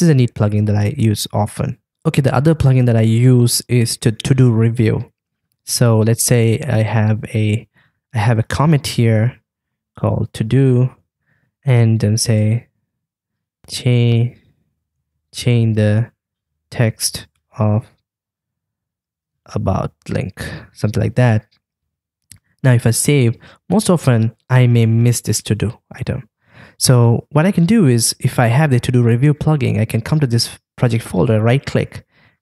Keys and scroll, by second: 9.4 super+/, 21.7 super+s.